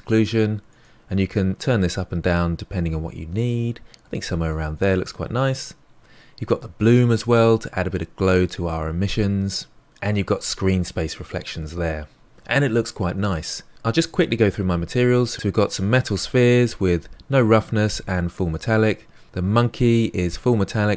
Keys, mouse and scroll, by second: 1.8-7.2 drag, 9.9 click, 15.3 click, 19.2 click.